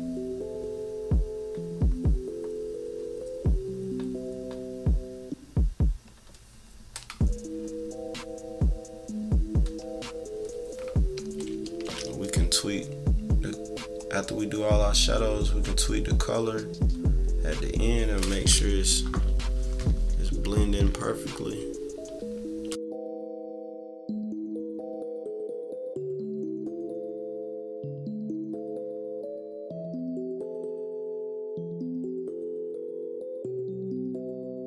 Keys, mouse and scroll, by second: 11.6 z, 13.1-17.6 drag, 19.7-21.6 typing, 21.1 scroll up 4, 21.5 scroll down 2, 22.4-22.8 scroll up 2, 23.1-30.8 drag, 31.2 -, 31.6 =, 31.9 scroll down 1, 32.1 =, 32.3 =, 32.7-34.6 drag.